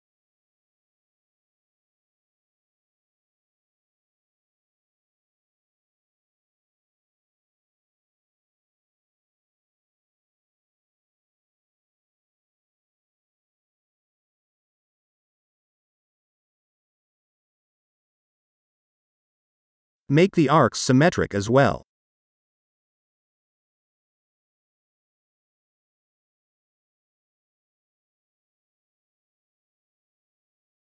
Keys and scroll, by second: 4.1 shift+o, 10.4 shift+d, 11.5 8, 11.7-12.7 Return, 15.6 shift+v, 16.8 KP_8, 16.9 Return, 25.9 s, 29.0 Delete.